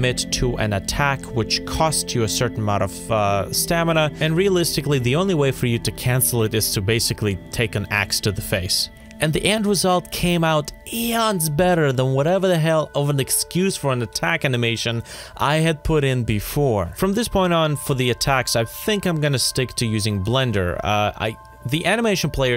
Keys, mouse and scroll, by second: 0.0-0.8 typing, 0.1 ctrl+z, 1.1 ctrl+s, 1.5 Delete, 1.8 scroll down 1, 1.9 ctrl+s, 2.1 ctrl+c, 2.3-4.6 typing, 2.5 ctrl+v, 2.7 ctrl+v, 2.7 Delete, 2.8 ctrl+v, 4.4 ctrl+z, 5.0 scroll up 1, 5.3 scroll down 1, 5.3 scroll up 1, 6.0-8.6 typing, 6.1 scroll down 1, 6.2 middle click, 6.3 Escape, 7.1 shift+scroll down 1, 8.3 scroll down 1, 8.7 ctrl+z.